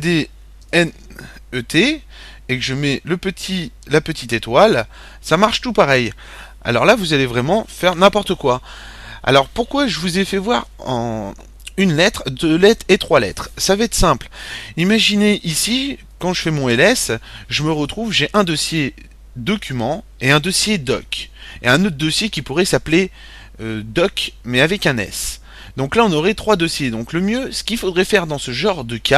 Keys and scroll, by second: 0.0-1.2 typing, 2.3-3.0 typing, 4.1 typing, 15.3-16.1 typing, 18.5 typing.